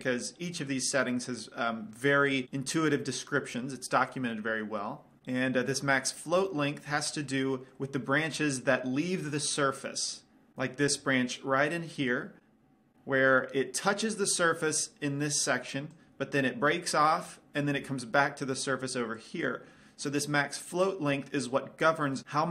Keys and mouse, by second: 11.1 d, 11.2-12.8 drag, 16.3 d, 18.0 d, 18.3-20.2 drag, 19.6 d, 19.7 d.